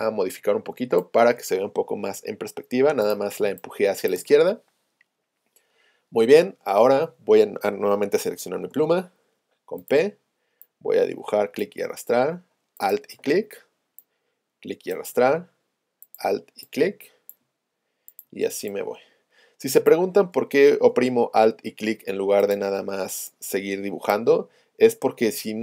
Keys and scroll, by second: 2.5 Right, 8.8 p.